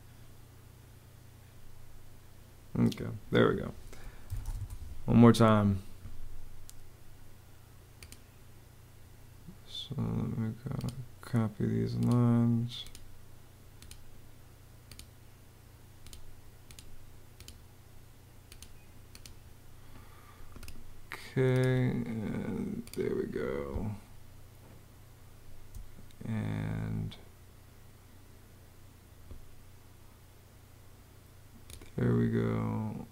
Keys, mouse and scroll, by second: 2.4 Escape, 3.7-4.6 typing, 23.4 space.